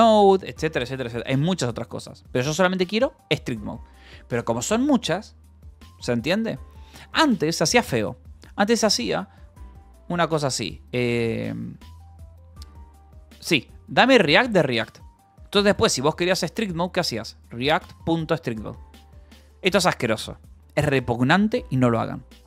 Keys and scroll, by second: 1.1 Escape, 2.2 u, 6.3-7.6 typing, 9.5 space, 10.6-18.7 typing.